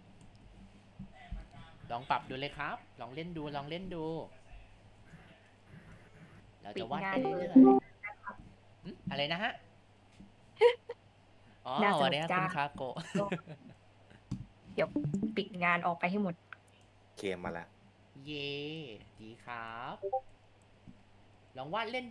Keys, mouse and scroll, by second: 0.5 ctrl+z, 0.9-1.3 scroll down 1, 5.0 shift+space, 6.0 click, 6.8 ctrl+z, 7.1 click, 13.8 click, 17.6 click, 18.3 ctrl+z, 18.8 click, 19.1 ctrl+z, 19.3-22.1 ctrl+drag.